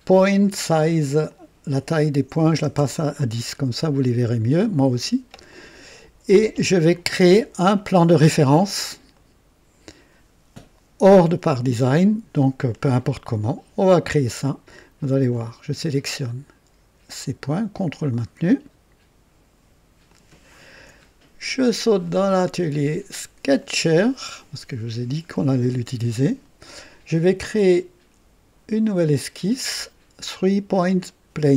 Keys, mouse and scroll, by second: 1.2 click, 2.3 KP_1, 2.3 KP_1, 2.7 KP_Enter, 2.7 KP_0, 4.7-5.4 right drag, 5.5 click, 9.1-9.9 right drag, 15.1 click, 17.8 ctrl+click, 20.1 ctrl+click, 23.7 click, 24.9 scroll down 2, 25.7-26.5 right drag, 29.0 click.